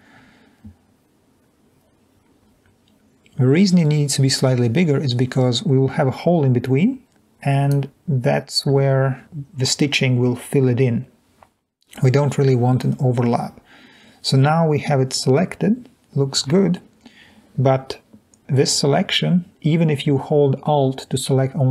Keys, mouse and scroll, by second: 0.3 click.